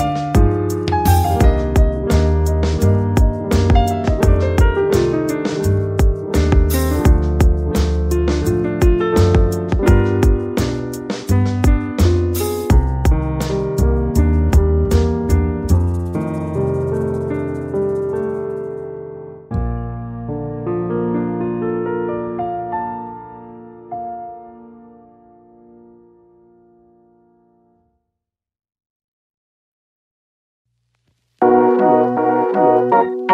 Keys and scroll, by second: 5.3 space.